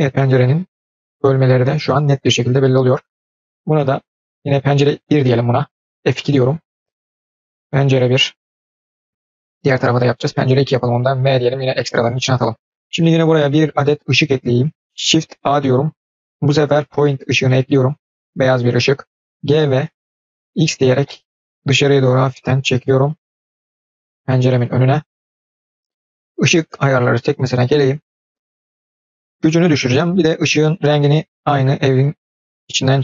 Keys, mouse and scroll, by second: 6.2 F2, 12.6-13.1 scroll down 4, 13.5 click, 14.1-14.8 scroll down 5, 14.8 scroll up 1, 15.3 shift+a, 29.5 click.